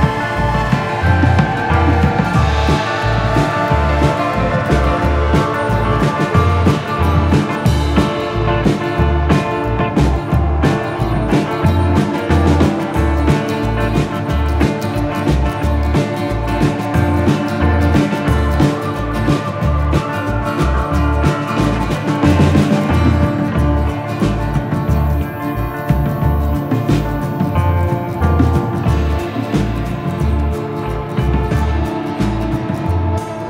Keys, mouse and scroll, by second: 1.2 click.